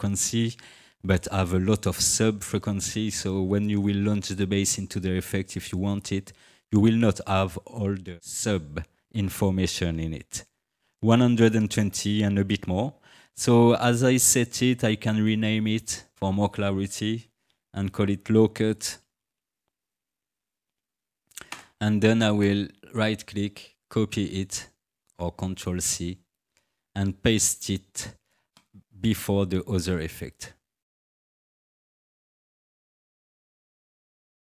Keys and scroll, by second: 18.6-21.2 typing, 21.5 Return.